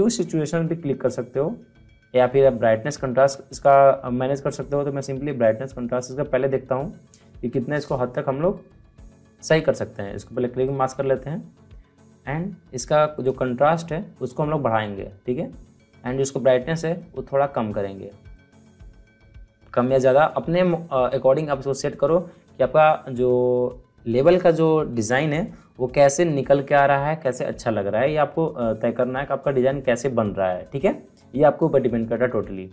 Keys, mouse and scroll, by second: 5.8 click, 10.6 click, 14.6-18.3 drag.